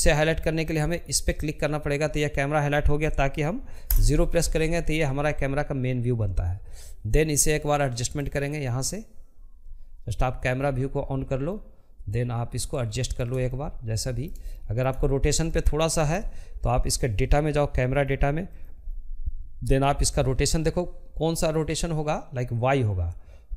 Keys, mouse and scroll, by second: 1.6 KP_0, 6.0-9.2 drag, 9.2-22.0 middle drag, 22.0-23.5 drag.